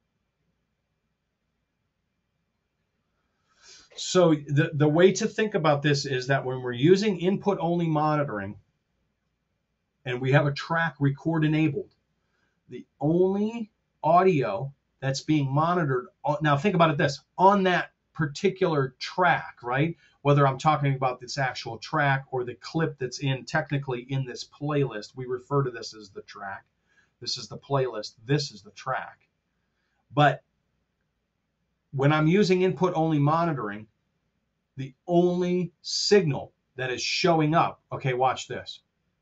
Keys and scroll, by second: 23.6 F7.